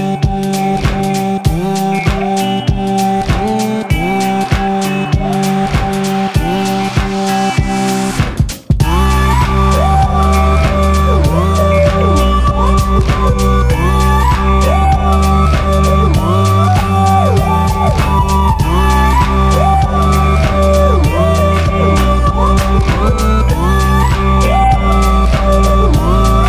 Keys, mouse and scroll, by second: 2.3 ctrl+Num_Lock, 2.3 click, 2.5-16.5 ctrl+drag, 7.2-16.2 drag.